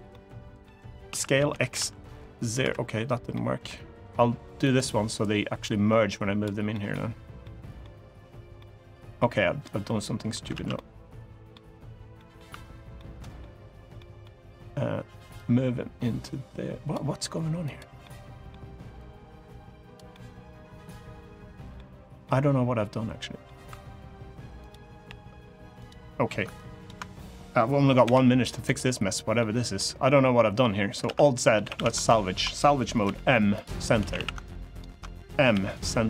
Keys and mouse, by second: 1.1 s, 1.1 x, 1.3 Return, 1.5 0, 2.4 Escape, 3.1 middle click, 4.4 click, 5.4 click, 6.5 middle click, 7.1 middle click, 8.3 middle click, 9.4 middle click, 10.3 ctrl+z, 10.5 middle click, 11.9 middle click, 12.7 middle click, 13.7 middle click, 15.1-16.6 drag, 17.4 click, 17.8 middle click, 18.8 click, 19.8-21.5 middle drag, 22.0-23.2 middle drag, 24.1 1, 24.7 g, 25.5 right click, 26.4 ctrl+right click, 29.1 middle click, 29.1 m, 29.8 middle click, 30.8 alt+z, 30.9 middle click, 31.4 a, 31.5 a, 31.9 ctrl+right click, 32.8 m, 33.8 a, 33.9 a, 34.2 ctrl+right click, 35.2 m.